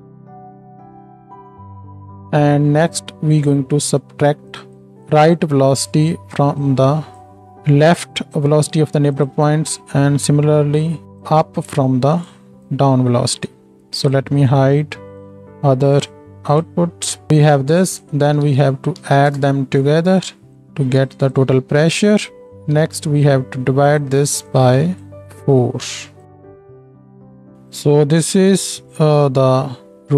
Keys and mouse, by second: 0.1 middle click, 0.7 ctrl+shift+right click, 0.8 ctrl+shift+d, 1.1-8.3 middle drag, 2.1-8.3 right drag, 4.5 click, 5.0-8.3 drag, 8.3 ctrl+shift+d, 8.4 click, 8.4-14.1 middle drag, 8.4-14.1 right drag, 10.7-15.1 drag, 14.7 ctrl+h, 15.2-15.9 ctrl+drag, 15.9 ctrl+h, 16.0 ctrl+h, 16.0-16.4 drag, 16.6-22.5 ctrl+drag, 16.9 ctrl+h, 22.8 shift+d, 24.5-30.1 drag, 29.3 ctrl+j.